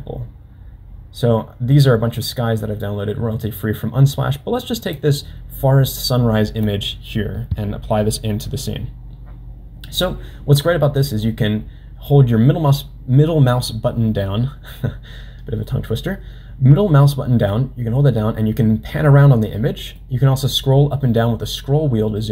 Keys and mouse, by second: 11.4-15.8 middle drag, 17.7-20.1 middle drag.